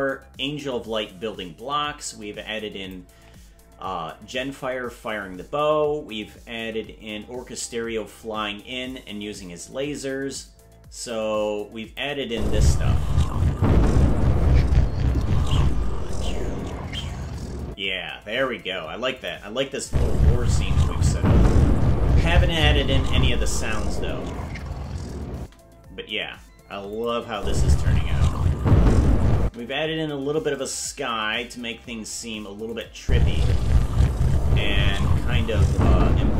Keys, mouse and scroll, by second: 8.9-12.0 drag, 12.2 space, 17.6 space, 19.2 click, 19.8 space, 25.4 space, 26.9 click, 27.3 space, 29.4 space, 32.7 click, 33.0 space.